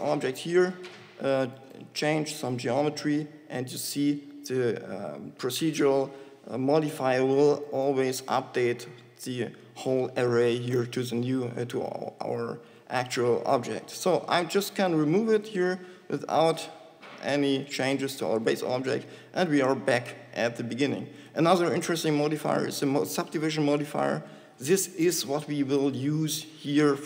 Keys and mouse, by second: 3.1 shift+g, 8.6 Tab, 15.7 click.